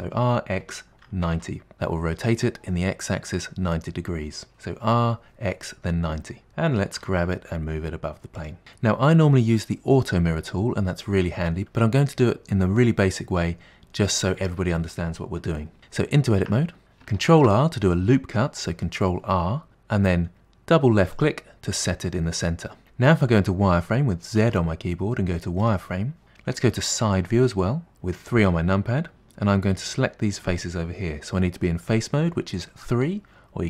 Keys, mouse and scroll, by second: 6.5 g, 16.5 Tab, 16.8 middle click, 17.3 ctrl+r, 24.4 z, 27.0 KP_3, 33.0 3.